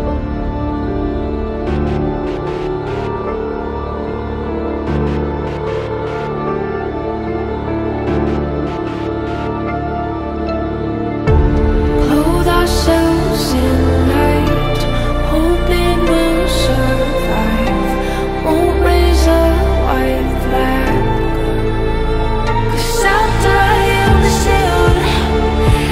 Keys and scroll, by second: 9.6 Delete, 20.3 Up.